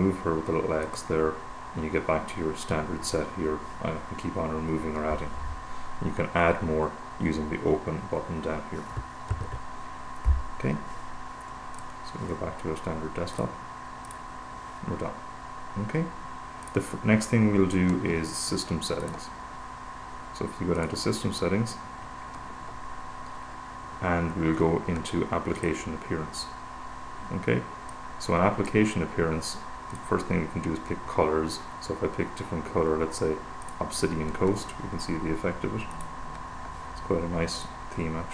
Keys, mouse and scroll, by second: 1.2 click, 9.5 super+0, 12.2 click, 13.7 click, 14.5 click, 15.8 click, 19.3 click, 21.2 click, 26.0 click, 28.3-29.7 drag, 30.3 click, 34.0 click, 36.3 click, 38.0 click.